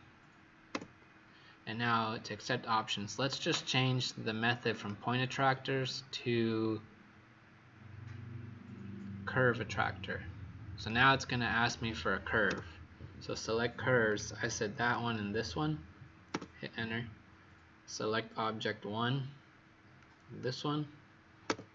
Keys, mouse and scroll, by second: 12.4 Return, 14.0 click, 16.3 Return, 19.1-19.9 scroll down 1, 19.9 click, 21.4 Return.